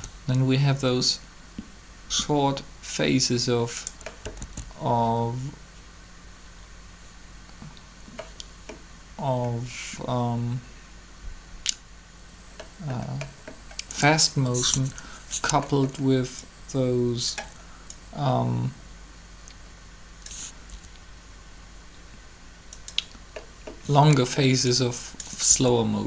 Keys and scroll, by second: 4.3 alt+a, 14.4 3, 20.6 r, 25.5 r.